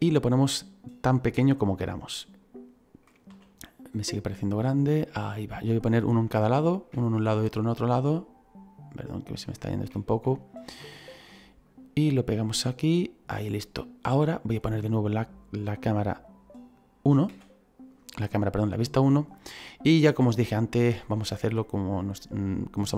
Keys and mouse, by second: 1.3 click, 3.2 s, 4.7 click, 5.0 middle click, 9.5 shift+middle click, 10.2 middle click, 11.6 click, 17.2 KP_1, 18.6 click, 19.9 click, 21.0 middle click, 22.7 click.